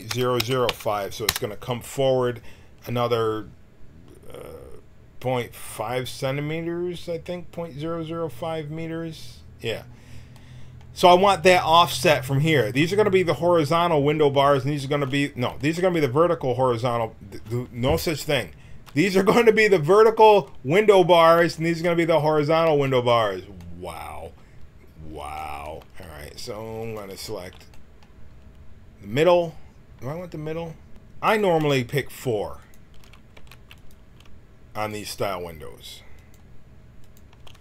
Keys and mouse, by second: 25.2-30.9 drag, 30.9 KP_Decimal, 32.6-37.6 drag, 33.3 Tab.